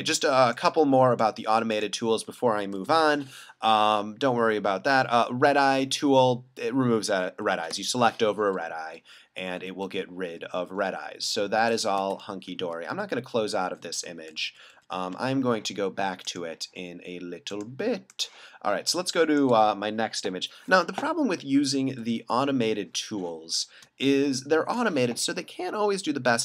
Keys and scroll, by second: 2.8 alt+super+=, 7.9 alt+super+-, 9.7 super+w, 12.5 Escape, 13.0 f, 14.3 super+-, 22.1 super+=, 23.2 f, 24.0 space.